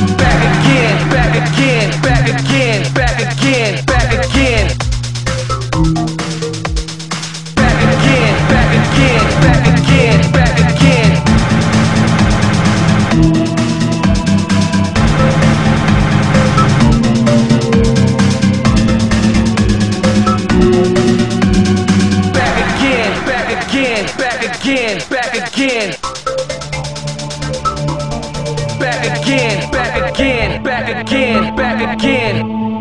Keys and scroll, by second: 1.0 ctrl+z, 12.3 alt+space.